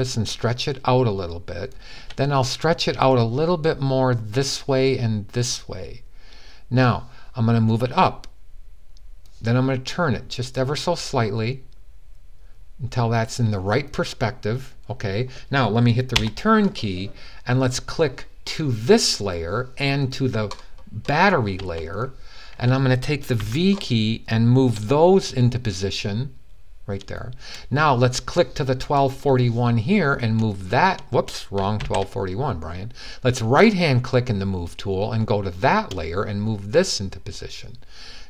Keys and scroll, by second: 23.1 v, 27.2 v, 30.1 v, 31.6 super+z.